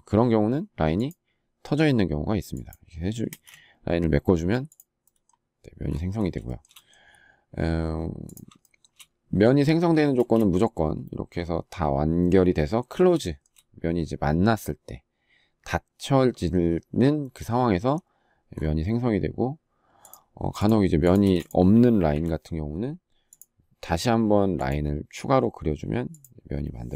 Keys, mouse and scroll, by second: 3.0 space, 6.2 shift+middle click, 8.4 shift+middle click, 8.6 shift+double middle click, 9.9 space, 13.0 shift+middle click, 21.0 space.